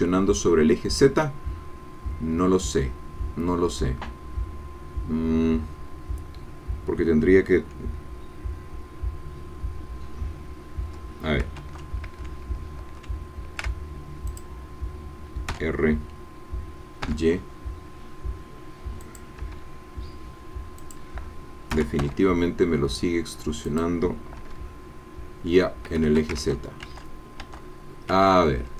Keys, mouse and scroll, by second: 11.7 ctrl+z, 13.0 ctrl+z, 14.3 click, 15.5 r, 17.0 y, 19.1 click, 19.6 e, 20.8 click, 21.7 r, 22.0 y, 23.7 click, 24.5 e, 25.9 Escape, 26.6 ctrl+z.